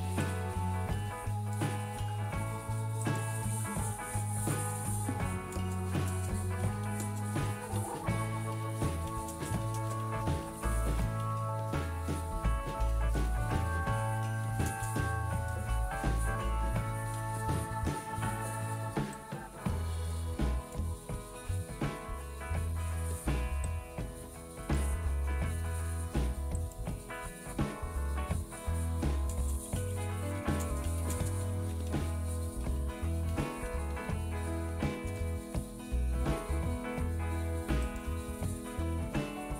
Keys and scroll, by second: 2.5-13.1 typing, 26.3-31.9 typing, 32.5 Return, 38.9-39.5 typing.